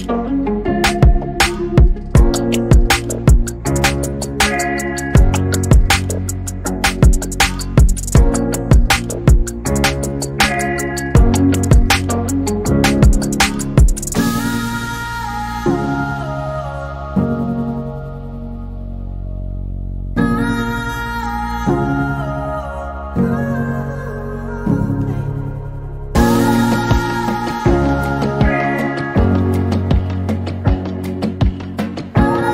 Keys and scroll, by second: 4.4 m, 5.5-6.4 typing, 8.3 m, 16.4 e, 17.4 space, 21.5 p, 23.2-24.1 typing, 27.1-27.9 typing, 30.9-31.8 typing.